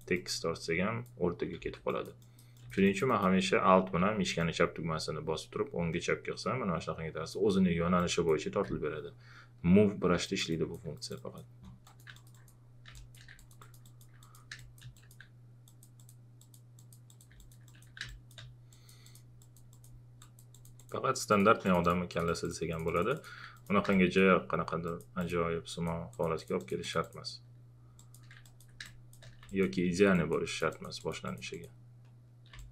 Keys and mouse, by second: 1.6 ctrl+z, 1.9 click, 4.4-8.0 alt+drag, 8.6 ctrl+z, 10.2 alt+click, 14.5 space, 15.7 click, 18.1 click, 23.9 space, 28.8 space, 29.5 click, 32.5 space, 32.6 click.